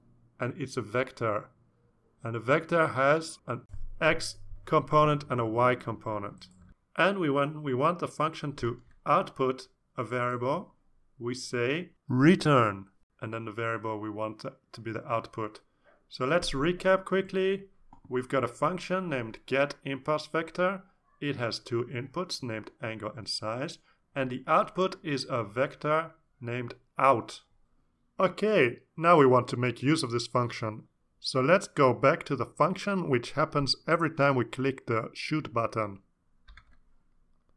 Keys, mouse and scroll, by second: 0.7 click, 1.7 click, 2.1-4.2 typing, 4.8 ctrl+s, 5.3 Return, 5.6 Return, 12.1-15.4 typing, 35.3-36.1 scroll up 4, 37.0 click.